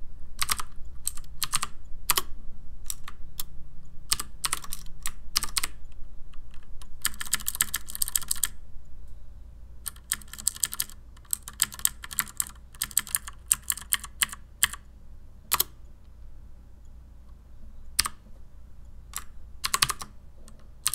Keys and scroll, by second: 0.2-2.0 typing, 2.1 Return, 4.1 ctrl+h, 4.4 ctrl+r, 5.4 ctrl+h, 5.6 r, 7.0 Down, 7.2 Down, 7.3 Down, 7.5 Down, 7.6 Down, 7.7 Down, 7.9 Down, 8.0 Down, 8.2 Down, 8.3 Down, 8.4-9.7 Down, 9.8 typing, 10.3 Down, 10.8 Down, 11.3 Right, 11.3-14.1 typing, 12.8 Down, 13.1 Left, 14.2 Left, 15.5 Return, 15.5 typing, 18.0 u, 19.6 ctrl+x, 19.8 ctrl+c, 20.6-20.9 typing.